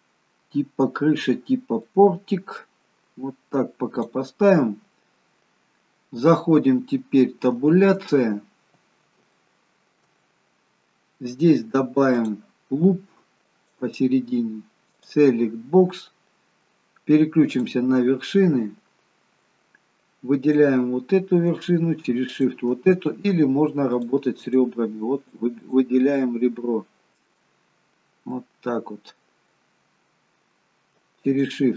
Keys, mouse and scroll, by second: 2.0 click, 7.8 Tab, 8.4-9.3 scroll up 1, 9.3 scroll up 2, 9.5 shift+middle click, 12.4 click, 13.7 click, 17.7 click, 18.6 middle click, 20.6 click, 22.5 shift+click, 24.2 click, 24.7 click, 26.4 click, 26.4 middle click, 28.6 middle click, 31.4 shift+click.